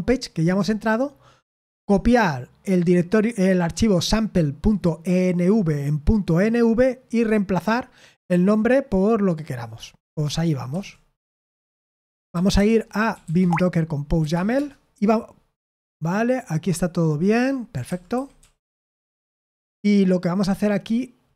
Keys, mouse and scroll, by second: 1.9 click, 3.1 click, 3.7 click, 10.4-14.5 typing, 17.6-18.8 typing.